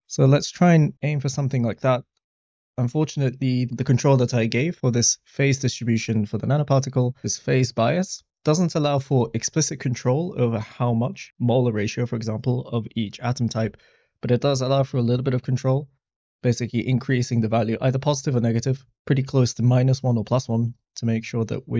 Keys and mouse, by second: 5.4 click, 8.0-9.2 drag, 14.9-21.7 drag.